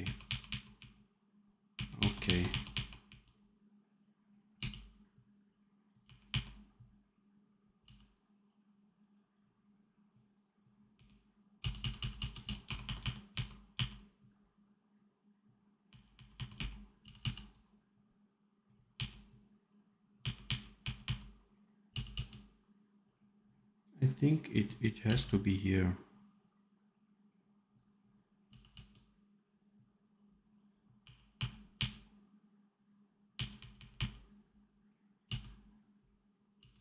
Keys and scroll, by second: 0.4 r, 1.7 r, 2.2 r, 2.7 r, 4.4 f, 5.9 r, 7.7 f, 10.8 r, 11.5 f, 12.1 f, 12.5 r, 13.7 r, 15.8 r, 16.9 f, 18.8 r, 20.1 r, 20.7 r, 21.8 f, 25.0 v, 28.3 f, 30.9 r, 33.5 r, 35.2 f, 36.6 f.